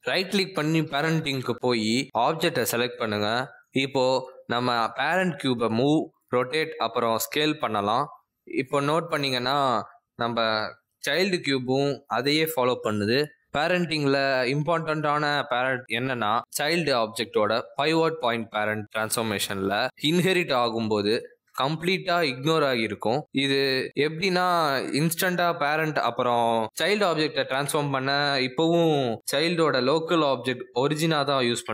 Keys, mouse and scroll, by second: 2.4 right click, 8.6 click, 9.3 g, 10.3 s, 11.3 r, 13.5 r, 16.2 g, 17.3 s, 18.4 r, 27.2 shift+click, 27.9 r, 31.5 click.